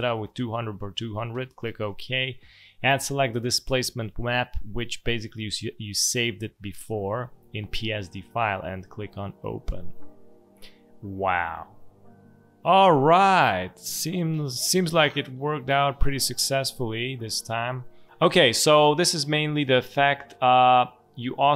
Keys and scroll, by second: 18.2 space.